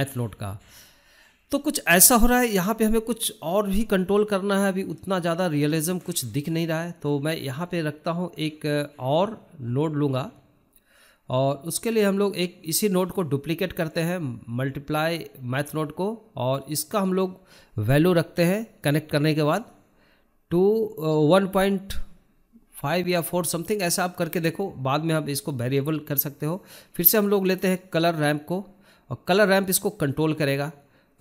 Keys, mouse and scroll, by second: 1.6-3.4 drag, 5.3 click, 6.3 shift+middle click, 6.5 scroll down 1, 6.8-7.9 shift+middle drag, 8.9 middle click, 9.3-31.2 click.